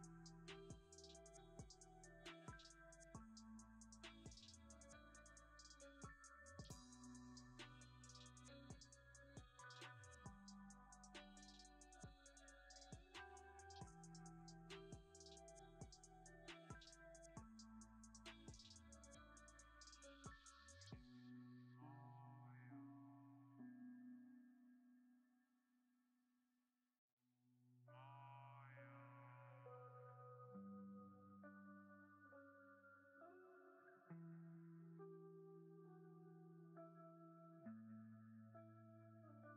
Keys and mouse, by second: 1.0-2.3 drag, 2.3-3.8 middle drag, 5.4 click, 6.1-9.7 drag, 11.6 click, 12.7 click, 14.2 middle click, 15.1 Tab, 16.2 3, 16.8 alt+click, 17.0 middle click, 17.9 ctrl+KP_Add, 20.4 click, 21.0 click, 21.8 right click, 22.8 middle click, 23.1 right click, 23.2 click, 23.4 middle click, 23.7 Tab, 24.6 b, 24.8 click, 32.3-33.4 drag, 34.1 middle click, 34.2-35.3 drag, 35.3 middle click, 35.7-37.4 drag, 38.5 middle click.